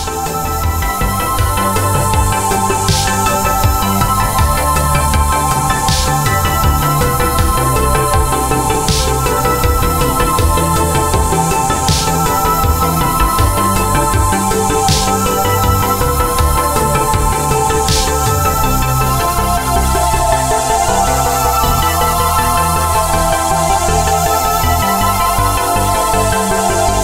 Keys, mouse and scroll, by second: 0.6 click, 1.2 click, 2.0 click, 3.4 click, 7.4 click, 7.9 alt+click, 8.4 click, 10.0 click, 16.6 scroll down 1, 17.2 click, 17.5-18.2 scroll down 1, 18.2 BackSpace, 20.3 click.